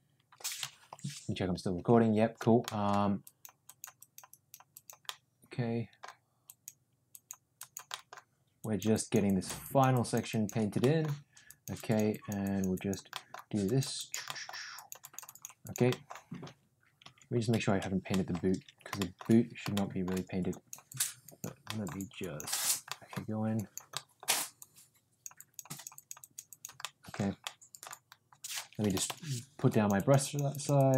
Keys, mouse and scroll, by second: 2.6 middle click, 3.2 click, 3.6 click, 3.9 click, 4.2 click, 4.7 click, 5.0 middle click, 6.4 click, 7.0 click, 7.5 click, 7.8 middle click, 8.5 click, 8.9 click, 9.2 click, 9.6 click, 9.9 click, 10.2 click, 10.7 middle click, 11.4 click, 11.7 click, 12.0 click, 12.4 click, 12.7 click, 13.1 middle click, 13.6 click, 13.9 click, 14.2 middle click, 14.7 click, 15.0 click, 15.2 click, 15.6 click, 15.8 middle click, 16.7 ctrl+z, 17.8 ctrl+z, 18.0 middle click, 18.9 middle click, 19.7 shift+middle click, 20.4 click, 20.9 click, 21.2 click, 21.7 middle click, 22.1 click, 22.5 click, 22.9 middle click, 23.5 click, 23.9 middle click, 24.5 click, 25.3 click, 25.6 click, 25.9 click, 26.1 click, 26.4 click, 26.8 middle click, 27.4 middle click, 28.7 [, 28.9 [, 29.0 [, 29.7 click, 29.9 click, 30.2 click, 30.5 click, 30.7 click.